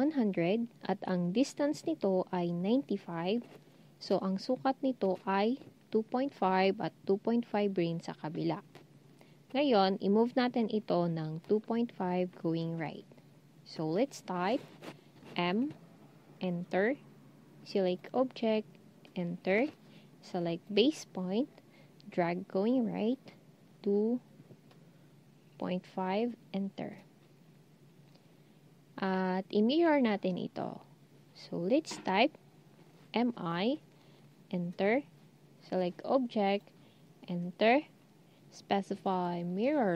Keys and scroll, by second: 15.3 m, 23.9 typing, 25.2-25.9 typing, 33.0-33.7 typing, 37.5 Return.